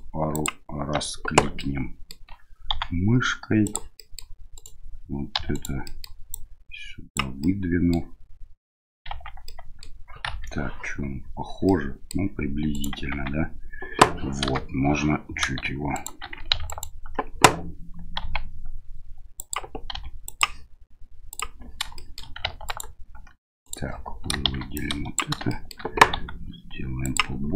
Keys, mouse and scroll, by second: 0.3 ctrl+click, 1.6 middle click, 2.7 s, 4.0 middle click, 4.5 right click, 5.3 1, 5.5 right click, 5.8 middle click, 6.3 click, 7.4 middle click, 9.1 Tab, 9.4-9.8 middle drag, 10.2 KP_1, 11.6-12.1 middle drag, 12.7 right click, 13.1 Tab, 14.5 KP_Enter, 14.5 KP_3, 15.9 shift+right click, 16.7 alt+right click, 18.2 g, 19.9 r, 21.3 click, 21.9 middle click, 22.6 right click, 23.6 right click, 24.5 shift+z, 24.8 click, 25.5 shift+middle click, 26.1 s.